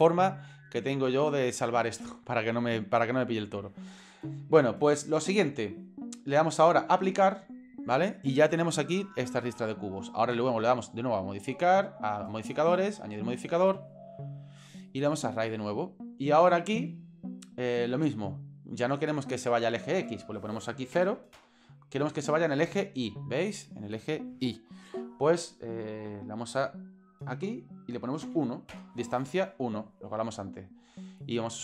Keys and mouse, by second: 6.9-7.5 drag, 12.9-13.3 drag, 14.4-15.3 drag, 20.3-21.4 drag, 26.2-29.1 drag, 31.4-31.6 drag.